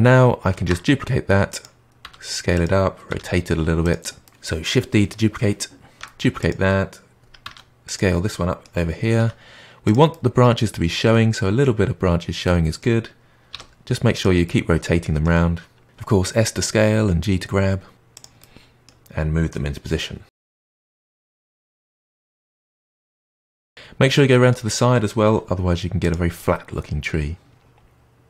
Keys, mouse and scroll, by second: 0.5 shift+d, 2.0 s, 3.0 r, 4.2-5.8 middle drag, 5.8 shift+d, 7.4 s, 8.2-9.1 middle drag, 9.1 g, 10.0-13.5 middle drag, 13.5 r, 14.4-16.4 middle drag, 16.4 shift+d, 17.6 s, 18.3-20.3 middle drag, 20.3-23.5 typing, 20.5 middle click, 21.4 middle click, 21.5 click, 22.3 middle click, 22.5 middle click, 23.7-25.2 middle drag, 25.2 g, 26.3-28.2 middle drag.